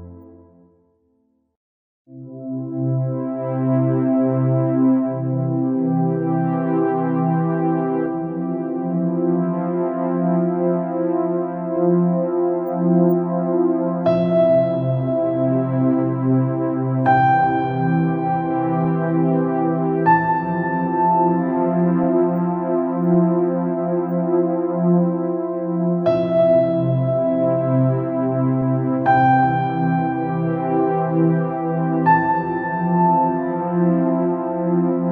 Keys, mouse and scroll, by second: 3.7 click, 5.0-5.6 scroll down 4, 5.6 middle click, 6.3-7.2 scroll up 8, 7.5 scroll down 2, 8.3 click, 8.8 scroll down 1, 10.1 click, 10.5-10.9 scroll up 3, 12.9 alt+click, 14.9 p, 16.4 click, 18.0 click, 19.9 click, 22.0 click, 23.5 scroll down 2, 24.2 scroll up 2, 24.6-25.1 scroll down 4, 25.1-26.2 middle drag, 26.2-26.6 scroll up 5, 28.9 click, 29.8 scroll down 1, 29.9-32.2 middle drag, 32.2 click, 32.9-33.3 scroll down 5, 33.3-33.7 scroll up 3, 33.7-34.1 scroll down 3, 35.0 click.